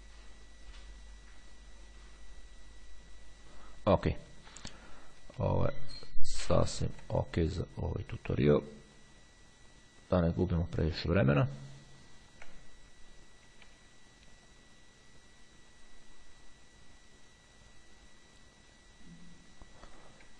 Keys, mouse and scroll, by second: 6.1 ctrl+scroll down 1, 6.3-7.1 ctrl+scroll up 1, 7.9-9.8 drag, 11.5-12.1 ctrl+scroll down 2, 13.6 [, 14.7-20.1 drag.